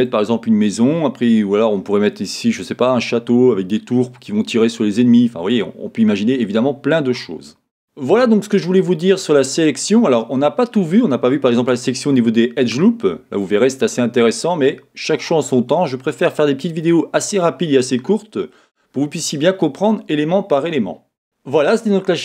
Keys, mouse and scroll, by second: 7.5 scroll, 7.5 scroll up 2, 7.6 scroll, 13.5-14.1 scroll up 2, 14.1-15.4 scroll down 3, 15.4-18.6 middle drag, 17.4-18.3 scroll up 2, 18.3 scroll up 1, 18.4-21.2 scroll down 2.